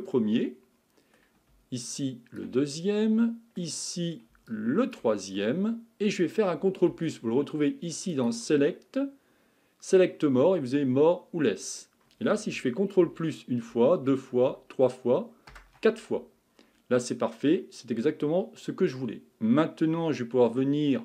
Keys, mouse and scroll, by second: 0.1-1.9 middle drag, 1.9 shift+click, 2.8-4.5 middle drag, 4.5 shift+click, 5.4-8.1 middle drag, 8.1-11.3 drag, 13.0 ctrl+KP_Add, 13.7 ctrl+KP_Add, 14.5 ctrl+KP_Add, 15.5 ctrl+KP_Add, 17.0-19.0 middle drag, 19.0-21.0 scroll up 1.